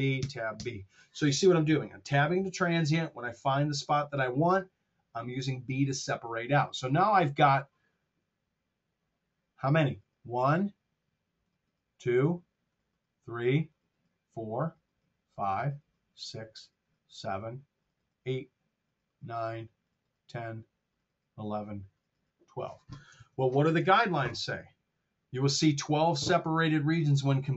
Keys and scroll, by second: 0.1 Tab, 0.4 b, 23.0 super+Tab.